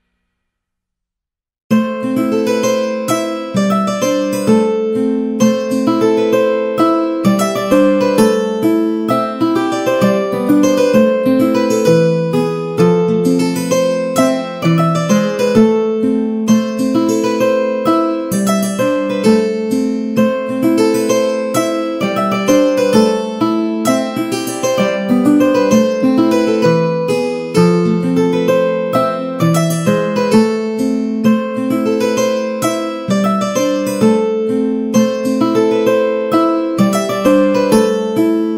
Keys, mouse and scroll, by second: 1.0 ctrl+b, 7.1 Tab, 7.4 a, 7.6 a, 8.2 middle click, 8.5 Tab, 8.9-10.8 middle drag, 20.5 middle click, 20.9 Tab, 21.2 shift+middle click, 21.9 Tab, 22.2-23.3 middle drag, 23.6 z, 24.2 1, 24.4 click, 25.2 middle click, 25.2 z, 25.6 shift+middle click, 26.3 g, 29.2 g, 30.9 Tab, 31.2 middle click, 31.6 shift+middle click, 35.2 shift+d, 37.2-38.3 right drag.